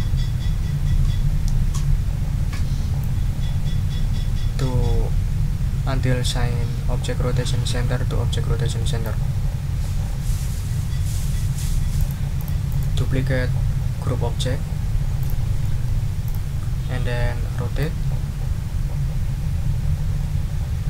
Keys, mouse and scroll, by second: 3.0-9.2 drag, 12.0 click, 12.4 click, 15.2 click, 15.6 click, 16.2 click, 17.8-20.8 ctrl+drag.